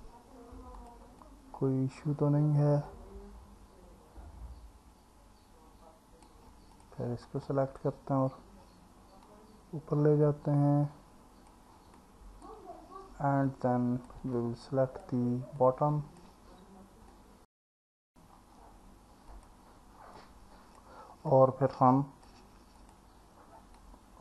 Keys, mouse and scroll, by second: 0.8 click, 1.2 alt+middle click, 3.0 click, 7.5 alt+middle click, 9.3 click, 12.0 alt+middle click, 13.5 click, 14.4 alt+middle click, 15.6 click, 17.1 alt+middle click, 19.4 click, 20.2 click, 21.3-22.3 alt+middle drag, 23.8 click.